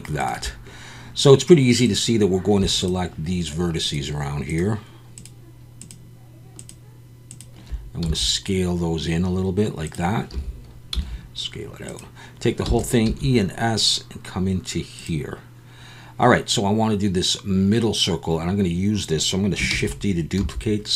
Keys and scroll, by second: 8.0 s, 10.3 a, 10.9 s, 12.6 e, 13.0 s, 19.7 shift+d, 20.4 s.